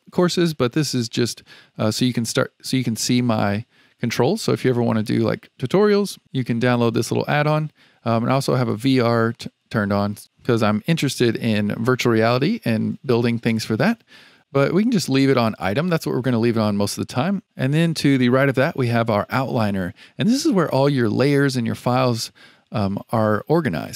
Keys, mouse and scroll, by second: 0.9 click, 8.4 click.